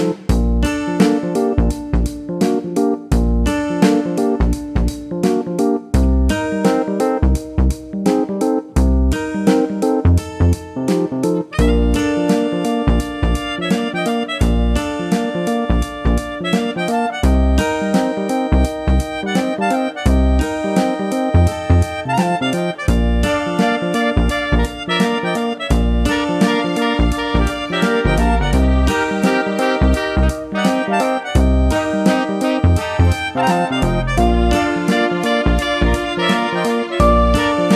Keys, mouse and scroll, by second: 4.0 shift+click, 11.5 click, 12.4 click, 14.8 click, 20.1 click, 22.0 click, 23.7 ctrl+click, 25.5 right click, 27.8 click, 29.7 click.